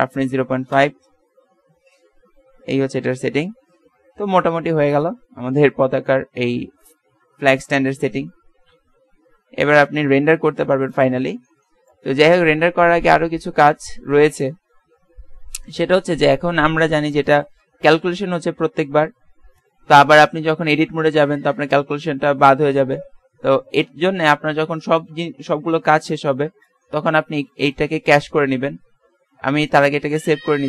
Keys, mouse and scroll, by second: 6.3 click, 6.5-9.2 middle drag, 7.7 KP_0, 8.5 KP_0, 9.6 z, 9.9 z, 10.6 ctrl+s, 17.1 click, 17.9 alt+a, 24.2 Escape, 29.1 click, 29.4 ctrl+s.